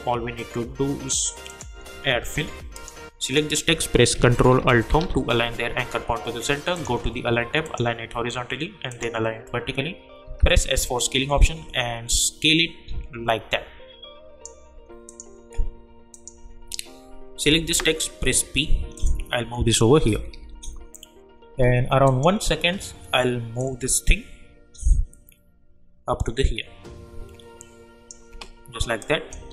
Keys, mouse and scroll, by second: 4.8 ctrl+alt+Home, 6.7 click, 10.2 s, 10.7-15.1 drag, 17.4 p, 18.9 click, 20.1 =, 20.3 =, 22.0-29.0 drag.